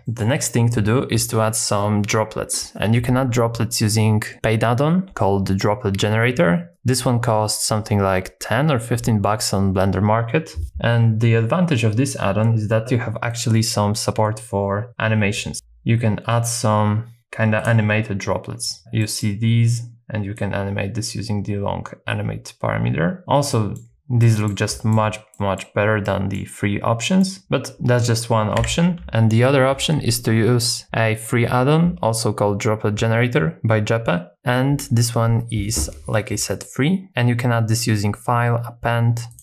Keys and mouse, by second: 0.1 shift+middle click, 16.6 click, 19.0 middle click, 20.5-23.2 drag, 23.5 middle click, 24.2 middle click, 24.7 shift+middle click, 25.3 middle click, 26.1 middle click, 27.0 middle click, 28.6 x, 37.1-39.4 drag.